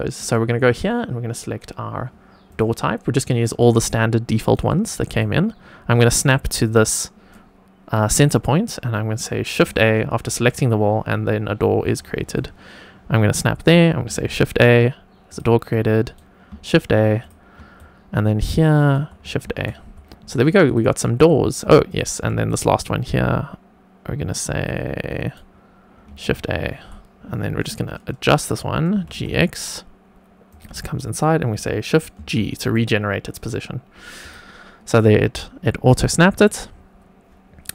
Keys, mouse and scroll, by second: 3.8 shift+right click, 5.2-6.3 shift+right drag, 6.5 click, 10.0 shift+a, 11.8 click, 12.3 shift+right click, 14.0 shift+a, 15.2 click, 15.6-16.4 shift+right drag, 16.5 shift+a, 17.1-17.5 drag, 17.7 shift+right click, 19.4 shift+a, 20.6 click, 21.8 click, 22.5-23.7 shift+right drag, 26.1 shift+a, 28.9 g, 29.1 x, 30.4-31.4 drag, 32.1 shift+g, 34.1 click, 36.0 shift+middle click.